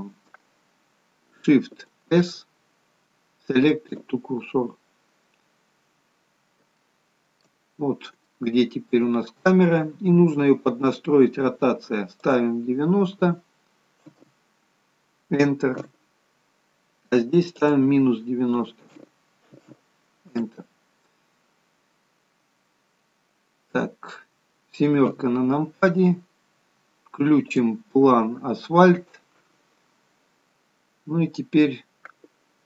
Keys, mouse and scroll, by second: 2.4 shift+s, 6.9 shift+middle click, 6.9-7.8 scroll up 5, 7.8-8.2 scroll up 1, 8.4 shift+middle click, 8.4 scroll up 1, 12.4 click, 17.7 click, 25.1 KP_7, 27.7 click.